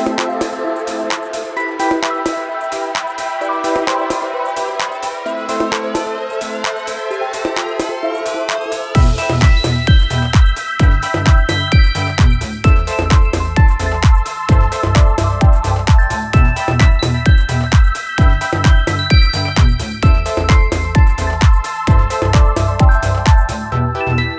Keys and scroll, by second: 4.5 ctrl+z, 4.6 ctrl+z, 16.5 ctrl+z, 21.1 ctrl+z, 21.9 ctrl+z.